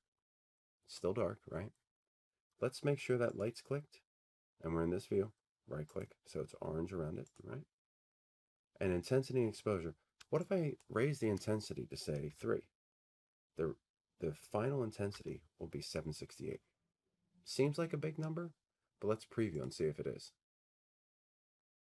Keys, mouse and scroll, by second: 1.2 click, 3.0 click, 5.3 click, 8.1 right click, 9.4 click, 9.4 right click, 12.8 click, 14.3 click, 17.1 Tab, 21.5-21.8 drag.